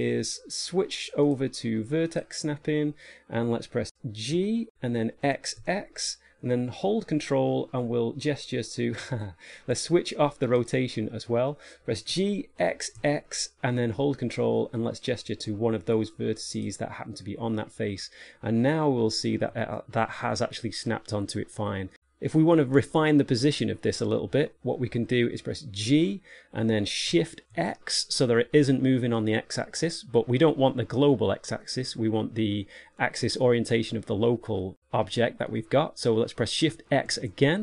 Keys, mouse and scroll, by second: 1.3 click, 4.6 g, 10.9 click, 12.4 g, 18.6 middle click, 19.7 shift+middle click, 20.4 middle click, 21.5 shift+middle click, 26.2 g.